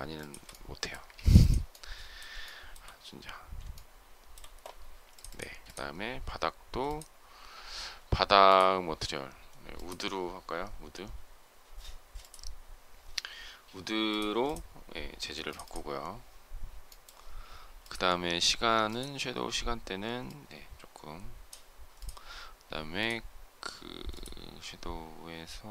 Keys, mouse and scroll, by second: 0.0 shift+click, 0.7 space, 0.9 Escape, 2.3 shift+middle click, 3.6 shift+middle click, 15.2 space.